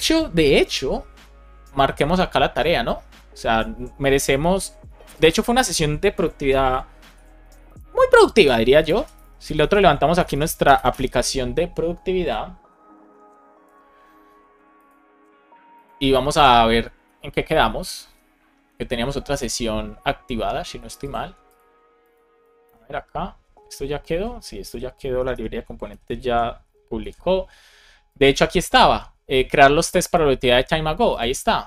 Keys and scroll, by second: 6.5 ctrl+c, 7.7 Return, 9.1 Return, 10.1 BackSpace, 10.8 Return, 22.6 super+Right, 23.8 ctrl+c, 24.3 BackSpace, 25.1 BackSpace, 26.2 Return, 26.9 super+Left.